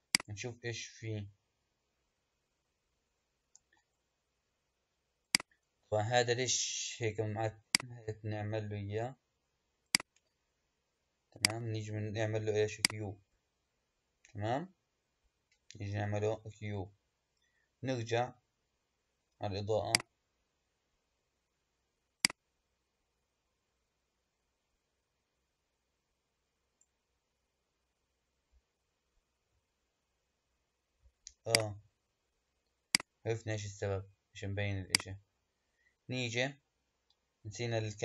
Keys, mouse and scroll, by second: 0.0-3.0 drag, 3.5 KP_1, 5.1 click, 7.5 click, 9.7-14.3 drag, 15.1-16.4 scroll down 3, 16.4 scroll down 1, 16.6-19.7 scroll up 2, 19.7 click, 22.1-25.1 drag, 31.4-32.9 drag, 34.8 click, 37.3-38.0 scroll up 1.